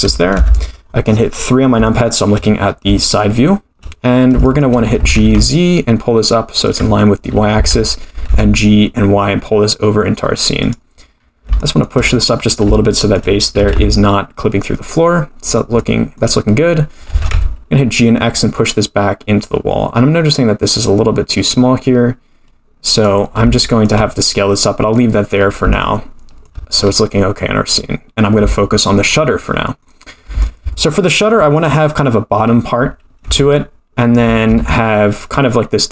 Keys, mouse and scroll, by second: 0.3 KP_3, 1.4-1.7 scroll down 5, 1.9-2.3 shift+middle drag, 2.7 scroll up 3, 3.0-3.5 shift+middle drag, 3.6-4.4 shift+scroll down 7, 4.4 shift+middle drag, 5.0 g, 7.5 g, 11.2-11.5 scroll up 4, 11.5 shift+middle drag, 12.0-12.6 scroll up 6, 12.6 scroll down 1, 12.7-13.1 shift+middle drag, 13.5 g, 15.8 middle click, 16.2-17.1 scroll down 4, 17.1 g, 23.5-23.8 shift+middle drag, 24.3-25.0 middle drag, 25.4-25.7 scroll up 4, 25.7-26.5 shift+middle drag, 26.8-27.4 scroll down 1, 27.4-28.4 scroll down 4, 28.5-29.1 shift+middle drag, 29.4-29.8 middle drag, 30.1 scroll up 2, 30.4-31.2 shift+middle drag, 31.5 click, 31.9-32.4 scroll down 2, 32.4-33.0 scroll up 3, 33.2 Tab, 34.4 ctrl+r.